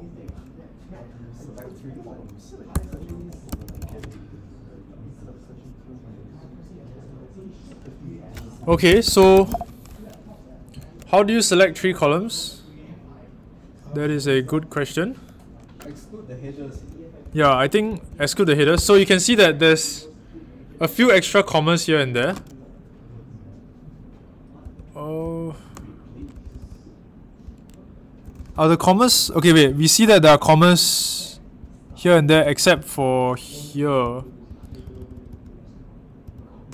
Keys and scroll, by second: 0.0-0.7 typing, 2.4-4.2 typing, 8.8-9.4 typing, 16.7-19.9 typing, 24.6-32.6 typing, 33.7-35.7 typing.